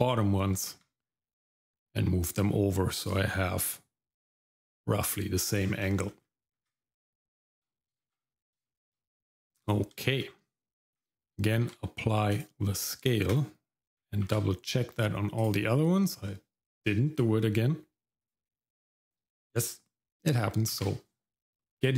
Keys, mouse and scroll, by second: 0.6 g, 5.6-6.1 scroll down 4, 6.1 middle click, 6.6 Tab, 7.2 shift+middle click, 8.0 shift+z, 8.7 shift+middle click, 9.2 middle click, 9.5-9.9 scroll up 1, 10.0 shift+middle click, 11.6 ctrl+a, 13.3 click, 14.2 ctrl+a, 18.2 click, 20.7 ctrl+a.